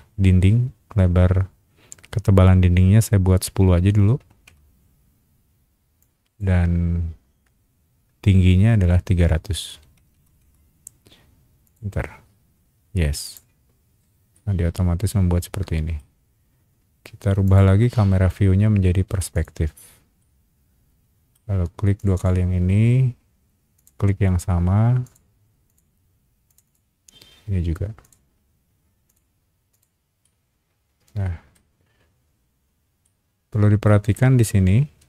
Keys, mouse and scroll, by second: 4.2 KP_1, 4.4 KP_0, 6.0 click, 9.7 KP_3, 10.1 KP_0, 11.6 click, 13.2 click, 14.3-15.9 middle drag, 17.4 click, 19.3 click, 20.2-21.3 middle drag, 22.0 click, 22.1 click, 23.7 click, 25.0 click, 25.7 click, 26.5 click, 26.6 click, 28.0 click, 29.1 click, 29.7 click, 30.2-31.5 middle drag, 32.6 scroll up 1, 33.0 middle click, 34.4-35.0 scroll up 2.